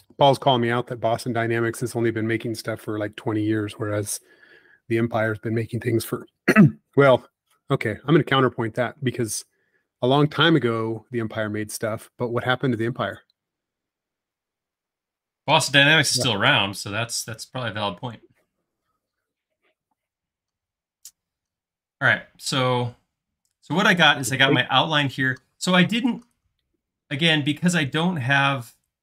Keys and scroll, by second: 0.3 q, 2.8 Left, 3.3 Right, 3.7 Left, 10.6 space, 22.0 l, 23.5 space.